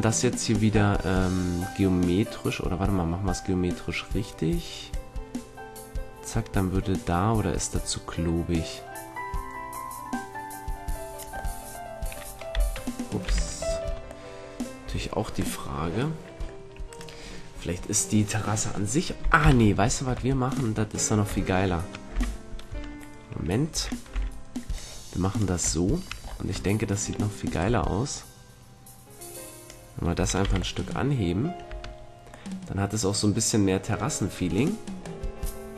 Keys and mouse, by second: 4.8-6.8 drag, 12.5 u, 13.2 z, 13.8 Tab, 14.8 a, 19.4 KP_1, 22.1 z, 22.6 Tab, 23.6 a, 24.0 b, 27.5-29.4 drag, 29.4 middle click, 30.1 a, 30.4 z, 31.6 Tab.